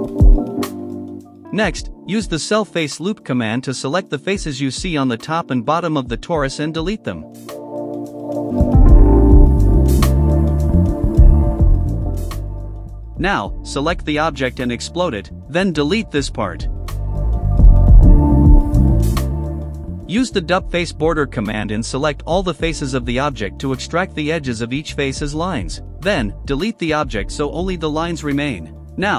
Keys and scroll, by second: 0.0-3.2 typing, 7.6-8.1 typing, 9.9 space, 11.1 Delete, 11.6-15.4 typing, 17.9 Delete, 20.0-22.0 typing, 23.1 space, 25.4 Delete, 27.1-28.3 typing.